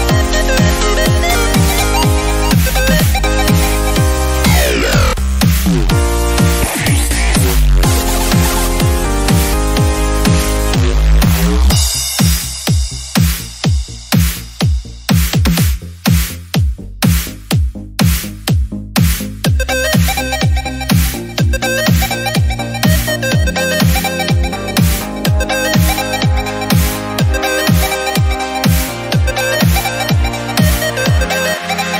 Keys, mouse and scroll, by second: 0.0 scroll down 1, 0.2 shift+middle drag, 0.5-0.8 scroll up 1, 0.8 drag, 1.5 scroll down 2, 1.6-2.1 middle drag, 2.1 shift+d, 3.0 scroll up 2, 3.3 click, 3.6 shift+d, 4.3 click, 4.5 scroll down 5, 4.5-5.0 middle drag, 5.0 drag, 5.3-6.3 scroll up 4, 10.9-14.1 right drag, 14.1-15.8 drag, 15.8 n, 16.0-16.5 scroll up 6, 16.5 click, 16.6 KP_Decimal, 16.8-17.2 middle drag, 17.2-18.0 drag, 23.0 click, 26.5 click, 28.1 l, 28.9-30.1 drag.